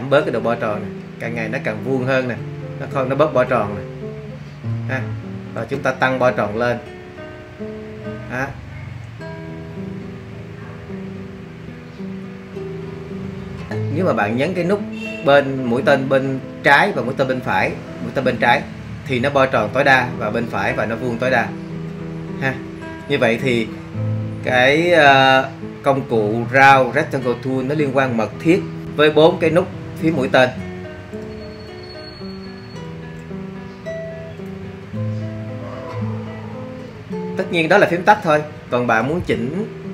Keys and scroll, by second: 5.7 Up, 17.9 Right, 20.3 Left, 22.7 Right, 22.7 Left, 30.4 Right, 31.2 Left, 31.9 Down, 32.4 Right, 32.9 Up, 33.2 Up, 34.4 Down.